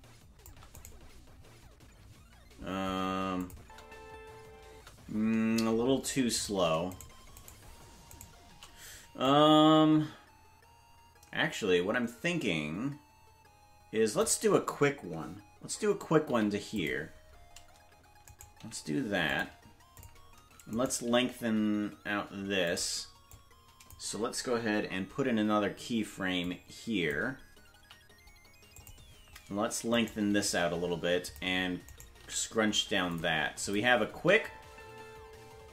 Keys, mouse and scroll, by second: 0.9 right click, 3.4 click, 3.5 space, 5.8 space, 6.5 right click, 7.4-8.4 shift+right drag, 9.2-14.2 drag, 20.0 click, 20.0 right click, 20.0 i, 20.0 g, 20.7 right click, 21.1 g, 23.3 click, 26.4 click, 27.7 i, 29.9 right click, 30.3 g, 31.9 right click, 32.2 g, 33.6 click, 34.1 space.